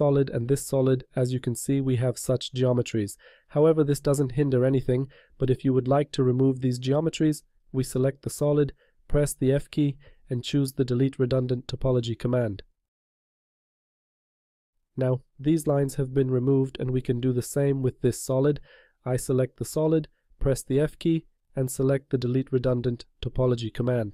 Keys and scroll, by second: 9.1 f, 21.1 e, 22.4 l.